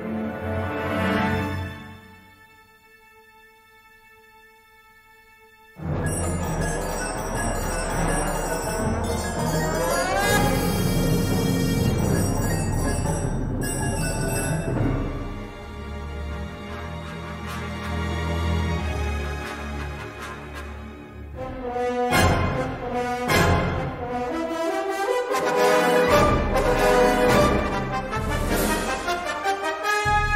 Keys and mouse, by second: 0.0 e, 6.1 middle click, 7.7 shift+middle click, 8.8 middle click, 9.1 3, 12.0 i, 15.6 middle click, 16.7-18.5 middle drag, 18.9 3, 19.1 click, 19.8 shift+middle click, 20.5 middle click, 23.1 s, 25.3 g, 26.2 ctrl+r, 28.2 3, 28.3 click, 29.0 x.